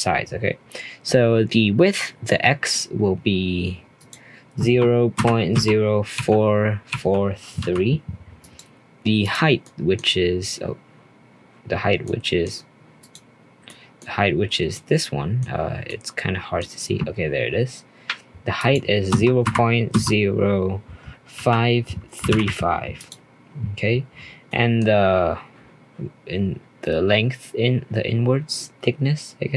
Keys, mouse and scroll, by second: 3.9-7.1 drag, 9.2-12.3 drag, 13.6-14.0 middle drag, 14.0 scroll up 2, 14.5 scroll down 1, 14.7 middle click, 15.5-15.8 scroll up 1, 15.8-18.6 middle drag, 18.6-21.7 drag, 24.4-25.0 middle drag, 25.0-28.1 scroll down 1, 28.1 scroll down 2.